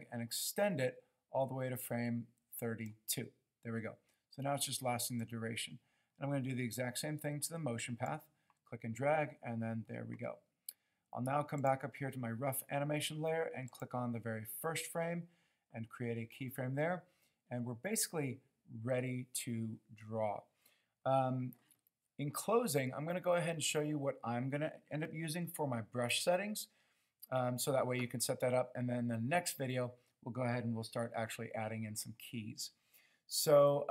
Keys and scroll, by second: 26.1 b.